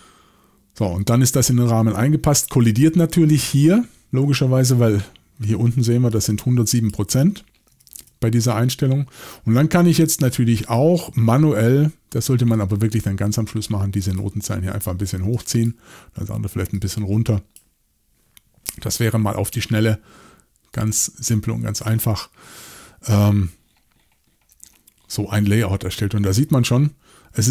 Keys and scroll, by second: 2.3 typing, 7.7 typing.